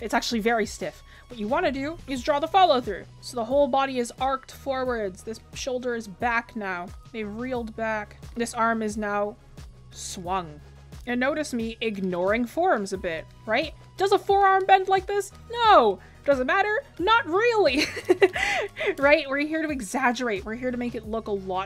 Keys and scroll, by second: 9.5 ctrl+z, 14.1 ctrl+z, 20.8 ctrl+z.